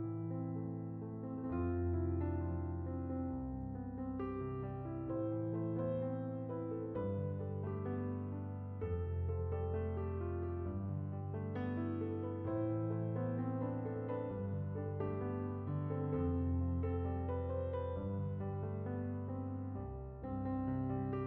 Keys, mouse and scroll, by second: 1.9-5.5 drag, 6.6 click, 15.5 click.